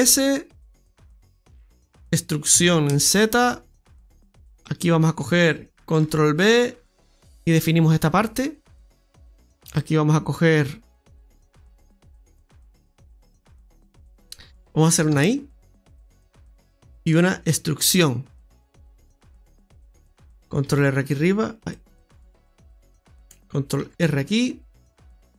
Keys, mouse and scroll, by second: 1.1-1.5 scroll down 2, 1.4 middle click, 2.5 e, 4.4 middle click, 4.6 alt+shift+right click, 5.9 ctrl+b, 7.3 Tab, 7.3 middle click, 7.5 middle click, 9.1 right click, 9.1-9.6 scroll up 2, 9.6 click, 10.6 right click, 12.1 shift+right click, 15.1 i, 16.5 middle click, 17.6 e, 18.9 middle click, 20.6 ctrl+t, 21.5 click, 22.5 ctrl+z, 23.7 ctrl+r.